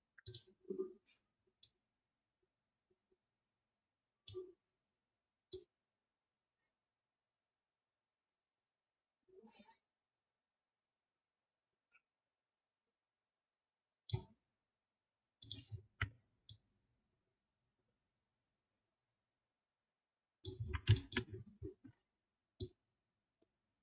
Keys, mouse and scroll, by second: 15.6-18.1 alt+scroll up 1, 20.5-23.5 alt+scroll down 1.